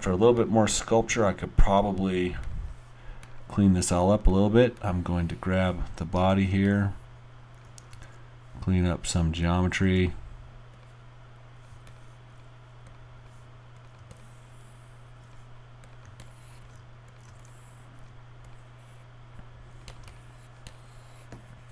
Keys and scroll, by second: 8.1 alt+r, 9.8 w.